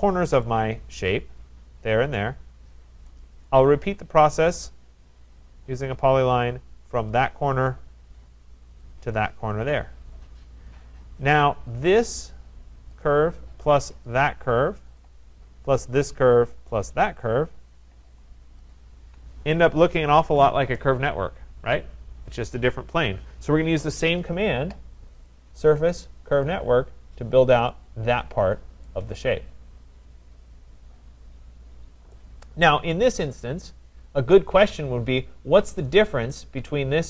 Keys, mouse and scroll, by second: 0.3 middle click, 1.0 right click, 2.7 middle click, 2.8 middle click, 3.3-4.4 scroll, 3.5 right click, 5.9 click, 7.1 click, 8.9 click, 9.7 Return, 11.8 click, 13.0 click, 14.1 shift+click, 15.0 click, 16.0 click, 17.1 click, 17.8 shift+click, 18.7 shift+click, 19.3 scroll, 20.4 right click, 25.2 click, 26.4 click, 27.7 click, 28.2-28.6 scroll, 30.3 scroll, 32.1 right click.